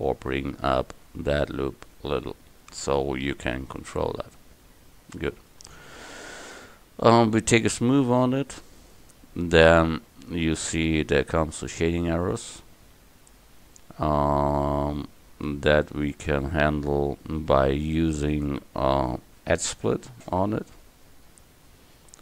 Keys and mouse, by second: 3.9 Tab.